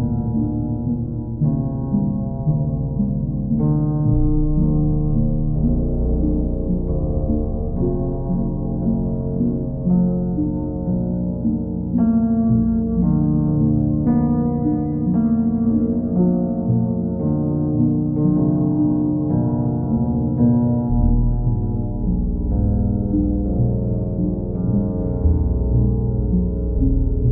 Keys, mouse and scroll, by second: 1.2 click, 1.8 click, 2.1 shift+click, 2.3 shift+click, 3.7 click, 4.3 click, 5.3 click, 6.9 click, 9.2 click, 9.4 ctrl+z, 9.8 ctrl+click, 12.9 click, 13.7 click, 14.1 shift+click, 14.9 shift+click, 15.0 click, 15.5 ctrl+click, 16.2 click, 19.4 click, 20.0 click, 20.4 shift+click, 20.6 shift+click, 21.2 alt+click, 23.8 ctrl+click, 24.3 click, 25.7 click, 26.6 click, 26.7 ctrl+z.